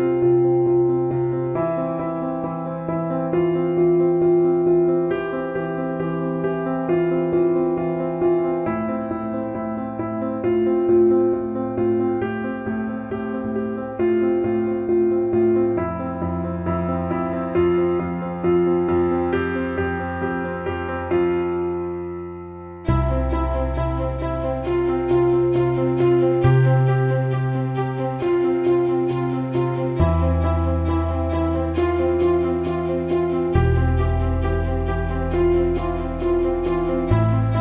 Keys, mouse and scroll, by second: 0.5 Tab, 3.4-6.6 drag, 7.0 alt+shift+middle click, 7.8 click, 9.6 click, 12.4 click, 13.7-15.7 drag, 17.4-18.7 drag, 18.9 alt+middle click, 20.6-21.7 drag, 22.0 click, 23.9 click, 24.7-26.1 drag, 26.5-27.7 drag, 28.9-30.0 drag, 30.2 alt+middle click, 30.9 alt+middle click, 31.7-32.7 alt+middle drag, 33.8 click, 34.3-34.9 alt+shift+middle drag, 35.7-36.7 alt+middle drag, 37.5-37.6 alt+middle drag.